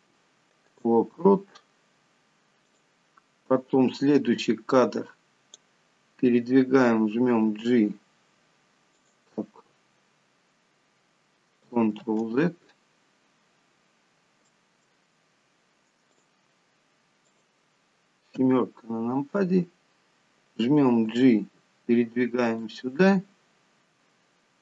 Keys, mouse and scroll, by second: 3.1 click, 4.7 click, 7.7 g, 12.4 ctrl+z, 13.6 scroll up 4, 14.9 shift+middle click, 16.4 click, 17.6 click, 18.8 KP_7, 19.6-20.2 scroll down 4, 21.4 g.